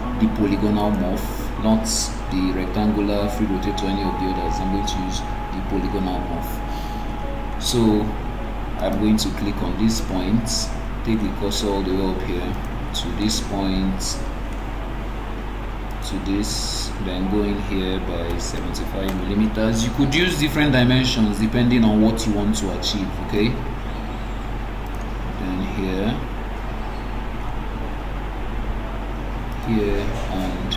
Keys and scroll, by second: 19.2 Return.